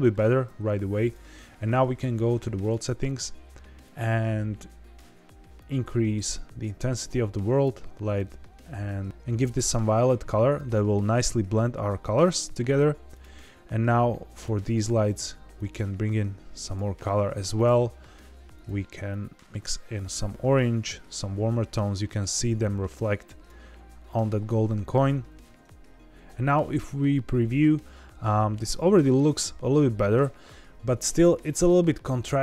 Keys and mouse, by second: 1.0 click, 2.6 click, 13.1 click, 15.0 click, 17.5 click, 18.5 click, 25.9 z.